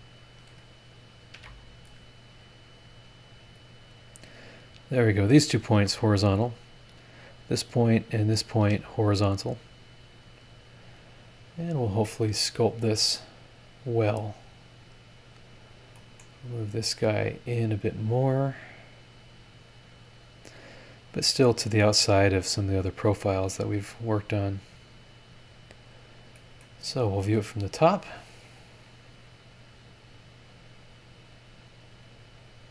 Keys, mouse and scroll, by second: 1.3 ctrl+z, 3.9 click, 5.3 click, 5.7 h, 6.3 scroll up 1, 7.1 click, 8.2 click, 8.6 h, 10.1-12.0 drag, 12.6-12.9 scroll up 2, 14.5 click, 15.7 scroll down 2, 16.0 middle click, 17.3-18.5 drag, 19.9-25.1 drag, 26.3 middle click, 28.8 click, 29.4 scroll down 1, 30.8 click, 31.5-32.2 scroll down 4, 32.4 scroll up 2.